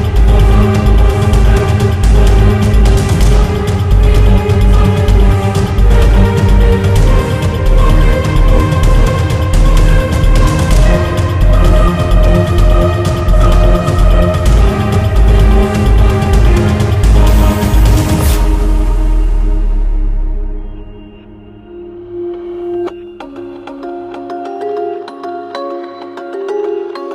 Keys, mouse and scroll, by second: 3.8-8.8 drag, 9.5-25.0 drag, 25.0 click.